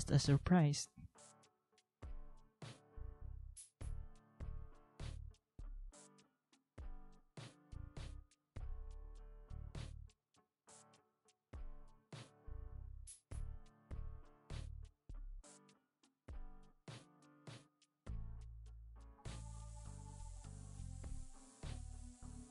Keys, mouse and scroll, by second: 8.8 ctrl+a, 11.5 ctrl+x, 14.5 ctrl+x, 15.8 ctrl+c, 17.1 ctrl+x, 17.5 ctrl+v, 20.9 ctrl+c, 21.5 ctrl+v.